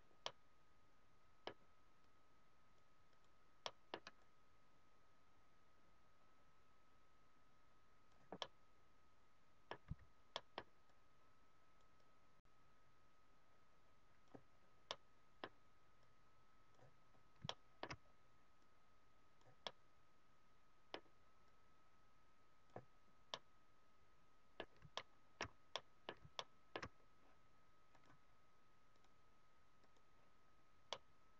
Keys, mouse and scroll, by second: 2.0 click, 3.7 middle click, 4.2 click, 8.5 middle click, 9.9 s, 10.3 middle click, 10.8 click, 12.0 click, 14.4 scroll down 2, 14.8 middle click, 16.0 click, 16.9 scroll up 1, 17.5 shift+middle click, 17.5 scroll up 1, 18.0 scroll up 2, 18.5 click, 19.5 middle click, 21.5 click, 22.9 scroll down 2, 23.2 middle click, 24.6 scroll down 1, 24.9 shift+middle click, 25.7 middle click, 26.3 shift+middle click, 26.9 scroll up 2, 28.0 click, 29.8 click, 30.8 middle click.